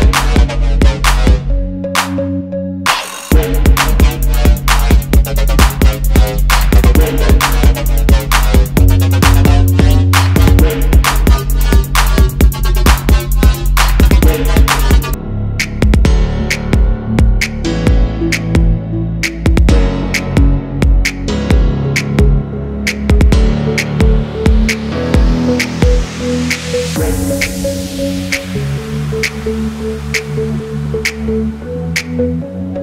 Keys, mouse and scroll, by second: 0.2 double click, 1.5 alt+scroll up 1, 2.2 shift+click, 4.1 alt+scroll down 1, 4.5 alt+scroll up 1, 7.1-7.6 alt+scroll down 1, 7.6 alt+scroll up 1, 9.2 double click, 9.4-9.8 alt+scroll down 1, 10.3 alt+scroll up 1, 11.4 alt+scroll up 1, 12.0 alt+shift+click, 12.6 alt+scroll down 1, 13.0 space, 13.3 alt+scroll down 1, 14.3 space, 16.3 alt+scroll up 1, 17.0 ctrl+shift+], 17.3 double click, 19.5 alt+scroll up 1, 22.7 shift+click, 23.2 ctrl+g, 23.5 double click, 23.7 ctrl+x, 24.2 double click, 26.8 double click, 27.8 typing, 29.5 alt+scroll up 1, 32.4 alt+scroll down 1.